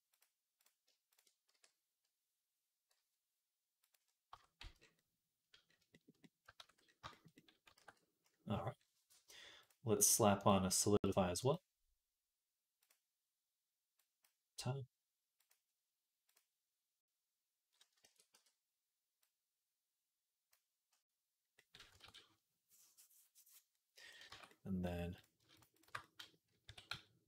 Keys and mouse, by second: 1.4 e, 4.2 Tab, 4.4 z, 6.5 ctrl+s, 7.7 ctrl+s, 9.4-11.0 drag, 11.0 middle click, 11.3-14.1 drag, 14.1-15.3 middle drag, 15.3-25.0 drag, 17.9 ctrl+a, 21.9 ctrl+s, 24.1 Tab, 25.0 shift+middle click, 25.4 alt+shift+click, 25.7 alt+middle click, 26.5-27.2 drag, 26.5 s.